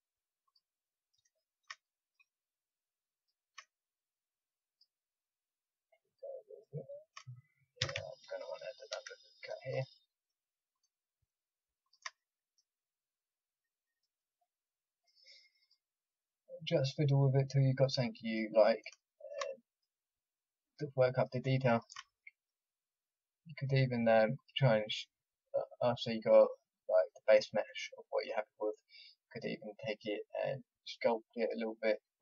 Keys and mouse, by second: 1.5-3.1 middle drag, 5.3 middle click, 6.4 middle click, 6.6-7.8 drag, 7.8 a, 8.8 ctrl+r, 10.0 click, 10.0 middle click, 10.7 click, 12.1-13.9 drag, 19.1 click, 20.6-27.0 drag, 27.0 middle click, 27.8 middle click, 29.3-32.2 drag.